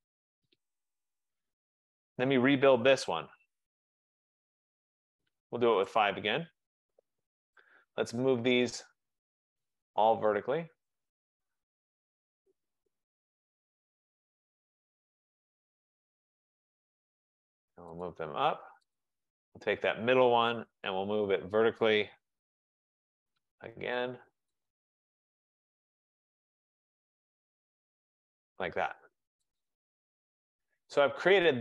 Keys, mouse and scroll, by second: 0.4 Return, 2.1 click, 3.4-3.8 typing, 4.0 Return, 6.1 click, 6.1 typing, 7.8 click, 9.8 shift+click, 11.1 click, 12.0-14.4 typing, 15.8 click, 17.9-18.6 typing, 18.1 click, 19.1 click, 20.5-20.8 typing, 22.7-25.1 typing, 24.8 click, 28.4 click, 29.7 click.